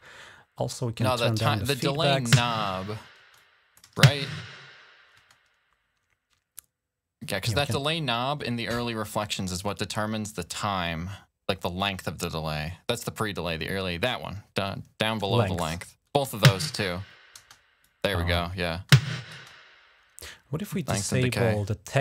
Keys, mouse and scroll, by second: 0.3 click, 1.1 click, 1.9 typing, 3.0-3.6 typing, 3.1 click, 3.6 click, 14.8 click, 16.0 space, 17.1 space, 17.6 click, 18.5 space, 19.1 space, 20.4 typing, 21.2 click.